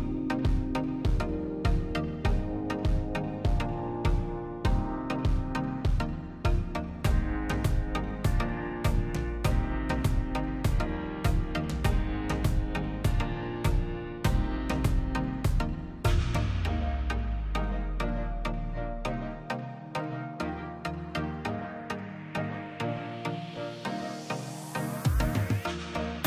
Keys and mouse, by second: 0.9-1.4 middle drag, 1.4 click, 2.9-3.7 drag, 4.3 click, 5.4-6.2 drag, 7.1 middle click, 7.7 middle click, 8.2 click, 8.6 middle click, 9.2 middle click, 9.6 shift+d, 10.2 middle click, 10.6 click, 11.0 n, 11.2 click, 12.6 click, 12.9 n, 13.1-13.8 middle drag, 14.3 middle click, 15.4-16.7 drag, 16.8 z, 17.5-18.4 drag, 19.1-21.8 drag, 21.9-22.5 drag, 24.1 middle click, 24.7 middle click, 24.9 click, 25.2 shift+d, 26.0 click.